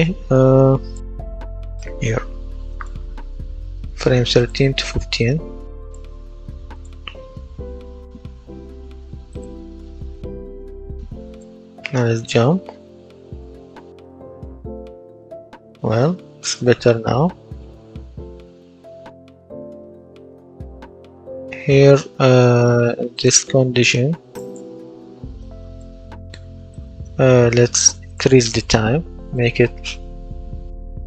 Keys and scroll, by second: 11.3 w, 11.7 space, 13.7 space, 15.3 space, 16.8 space, 18.3 space, 20.1 Escape, 29.0 KP_0, 29.3 KP_Decimal, 29.9 KP_2, 30.9 KP_5.